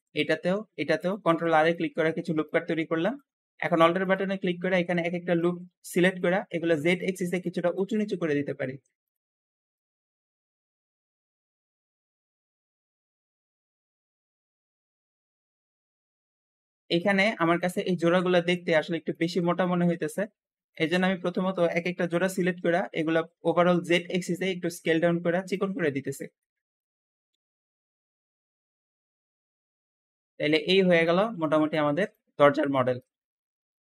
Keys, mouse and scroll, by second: 0.2 ctrl+r, 0.3 ctrl+r, 1.6 shift+middle click, 2.5-2.9 scroll up 1, 2.9 shift+click, 3.6 alt+click, 3.9 alt+click, 5.3 alt+click, 6.8 alt+click, 7.2 alt+shift+click, 7.6 alt+shift+click, 8.9 alt+shift+click, 9.3 alt+shift+click, 9.8 alt+shift+click, 10.3 alt+shift+click, 10.5 alt+shift+click, 10.7 alt+shift+click, 11.0 shift+middle click, 11.2 shift+click, 11.4 alt+shift+click, 11.8 alt+shift+click, 12.3 shift+middle click, 12.5 scroll up 2, 12.6 shift+click, 13.1 alt+shift+click, 13.5 scroll down 1, 13.6 shift+middle click, 13.8 shift+click, 14.3 alt+shift+click, 14.9 alt+shift+click, 15.2 alt+shift+click, 15.5 alt+shift+click, 15.9-16.3 scroll down 2, 16.1 Tab, 16.3-20.6 shift+middle drag, 20.6-21.8 shift+drag, 22.1 l, 22.7-23.1 scroll up 3, 23.7 s, 23.7 s, 24.0 z, 24.1 z, 25.7 scroll down 2, 26.0 shift+middle click, 26.8 shift+click, 27.1 l, 27.3 s, 27.4 z, 27.9 shift+middle click, 28.1 scroll up 2, 28.2 click, 28.6 l, 28.7 s, 28.7 s, 28.8 z, 29.4 Tab, 29.5 Tab, 29.7 scroll down 3, 29.8 shift+middle click, 29.9 scroll up 1, 30.2 shift+middle click, 30.7 scroll down 2, 30.9-32.2 shift+middle drag, 32.2-32.7 scroll up 1, 32.7-33.8 shift+middle drag.